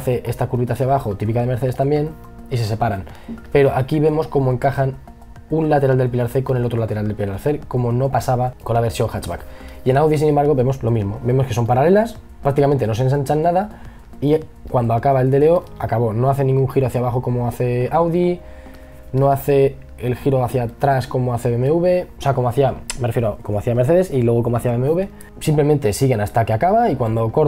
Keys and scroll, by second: 8.8 e, 9.7 b, 18.3 e, 18.9 b.